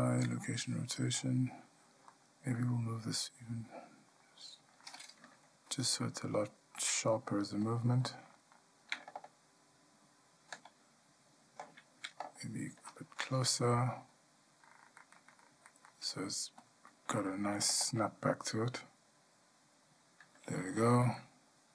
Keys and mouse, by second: 9.8-21.7 drag.